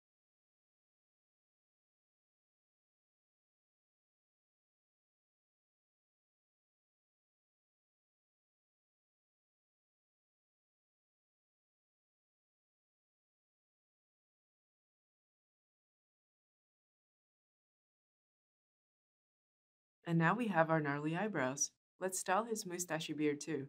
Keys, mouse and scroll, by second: 8.1-9.3 shift+drag.